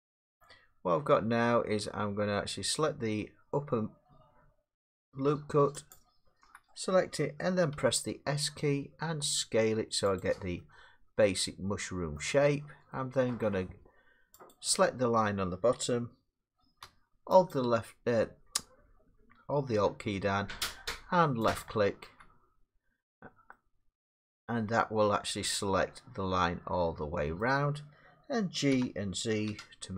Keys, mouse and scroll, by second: 5.4 middle click, 5.9 alt+click, 7.7 s, 10.2 click, 12.1 middle click, 13.5 middle click, 14.5 click, 17.6 alt+click, 21.6 click, 27.6-29.7 middle drag, 28.7 g, 29.5 z.